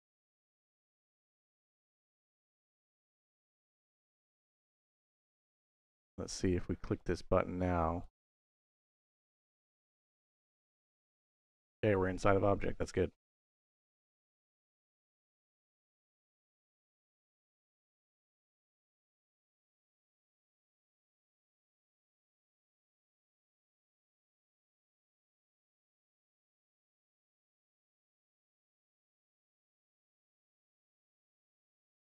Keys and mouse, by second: 4.8-5.9 drag, 7.0 click, 8.4 middle click, 9.4 middle click, 10.5 click, 21.7 middle click, 22.4 click, 23.5-24.6 drag, 25.7 middle click, 27.3 click, 27.5 x, 28.3 middle click, 29.9 middle click, 31.2 middle click.